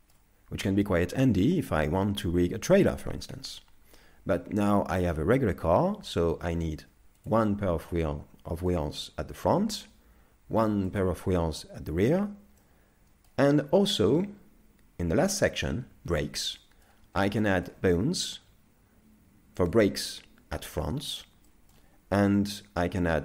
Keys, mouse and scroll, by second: 9.1 click, 9.1 middle click, 10.9 click, 12.6 middle click.